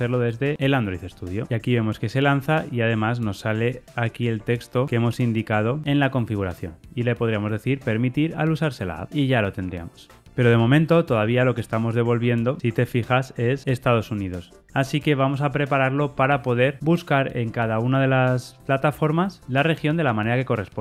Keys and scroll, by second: 0.7 ctrl+r, 0.7 shift+F10.